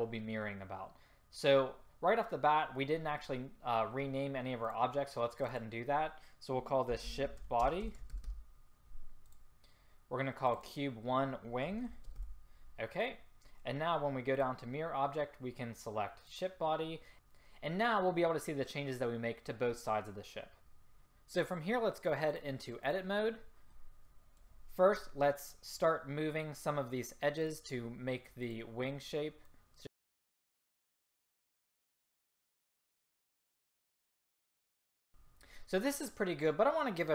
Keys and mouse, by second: 4.7-7.5 drag, 10.5-14.3 drag, 14.4-19.6 drag, 23.8-24.1 middle drag, 27.6-28.5 drag, 29.9 click, 31.2 click, 31.8 middle click, 32.6 middle click, 33.3 middle click, 34.0 click, 34.4 click.